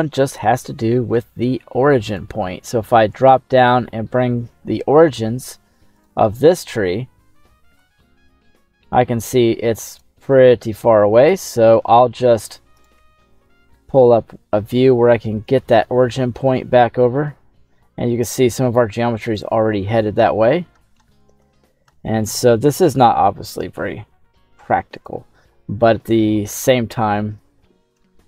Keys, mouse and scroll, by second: 1.1-3.0 drag, 3.4 middle click, 4.1 scroll down 2, 4.5 middle click, 5.9 right click, 6.6-7.1 scroll down 2, 7.8 g, 10.2 right click, 11.3 g, 12.5 KP_1, 12.9 right click, 13.0 KP_1, 14.0-14.3 scroll up 2, 14.3-14.7 scroll down 2, 15.8 g, 19.4 click, 19.9-21.0 scroll up 9, 21.0 shift+middle click, 21.6 scroll up 2, 21.8 shift+middle click, 22.9 g, 25.0 click, 25.4-26.4 middle drag, 26.5 KP_1, 27.0-27.5 scroll down 2, 27.5-27.9 scroll up 2, 28.0 shift+middle click.